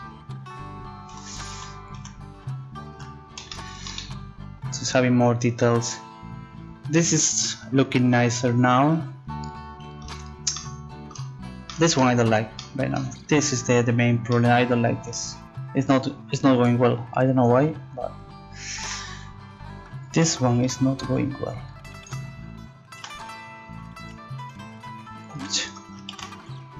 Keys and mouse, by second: 1.5 z, 1.9 z, 3.0 Tab, 3.7 click, 4.2 right click, 13.4 right click, 13.9 Tab, 18.8 z, 20.1 a, 20.5 b, 24.0 z, 24.2 click, 26.1 ctrl+z.